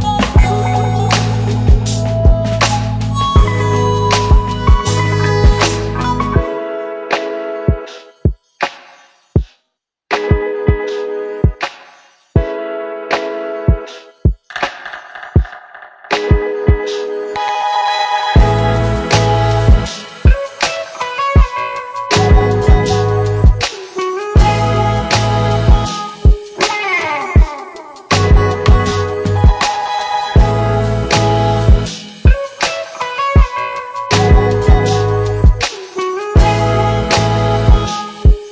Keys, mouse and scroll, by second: 1.1-1.9 click, 3.4 shift+click, 12.8-18.7 click, 20.8 click, 23.2 Return, 24.7-26.6 typing, 29.4 click, 31.5 click, 35.7 click, 36.1 shift+click, 38.4-38.5 click.